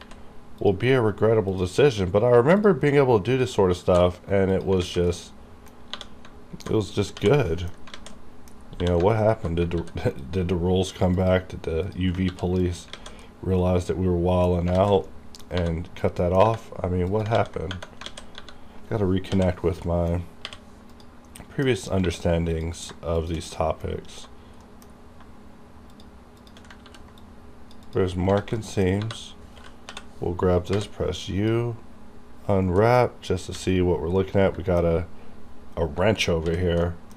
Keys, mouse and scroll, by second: 0.1 ctrl+z, 0.6 ctrl+click, 2.6 ctrl+click, 3.8 ctrl+e, 4.8 click, 4.9 alt+a, 5.2 middle click, 6.0 3, 7.2-7.5 typing, 7.5 middle click, 7.6 middle click, 7.8 scroll down 1, 8.0 alt+a, 8.2 middle click, 8.6 scroll up 1, 8.8 2, 9.3 alt+click, 9.8 ctrl+e, 10.2 click, 10.3 click, 11.2 click, 11.9 click, 12.3 ctrl+e, 12.7 click, 13.0 alt+a, 13.3-14.8 middle drag, 14.8 alt+a, 15.1 middle click, 15.7 3, 16.0 scroll down 1, 16.3 middle click, 17.2 click, 17.4 ctrl+a, 18.1 alt+a, 18.4 3, 19.9 middle click, 19.9 middle click, 20.5 u, 20.9 click, 21.0 click, 21.5 middle click, 21.7-22.1 scroll up 1, 22.1 2, 22.6 click, 23.2 shift+click, 23.6 middle click, 24.7 middle click, 24.9 scroll up 1, 26.0 shift+click, 26.9 ctrl+e, 27.2 click, 27.9 click, 28.2 scroll down 1, 28.4 alt+a, 28.7 alt+middle click, 29.0 scroll up 1, 29.1 3, 30.7 typing, 31.3 click, 31.9 scroll down 1, 32.9 middle click, 33.1 scroll up 1, 33.6 a, 34.3-36.5 middle drag, 36.5 h, 36.9 middle click.